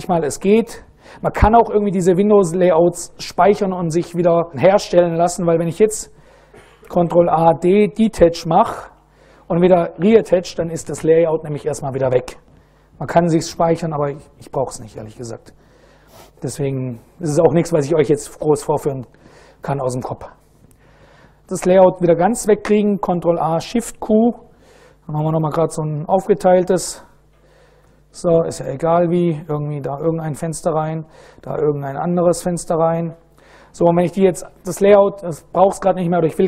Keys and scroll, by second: 7.0 ctrl+a, 7.8 ctrl+d, 8.8 Up, 9.6 Return, 23.8 super+Right, 24.8 ctrl+a, 25.3 ctrl+shift+\, 26.5 ctrl+a, 27.5 shift+s, 28.5 ctrl+a, 29.0 Tab, 29.3 ctrl+a, 30.3 ctrl+a, 30.5 Tab, 31.0 ctrl+a.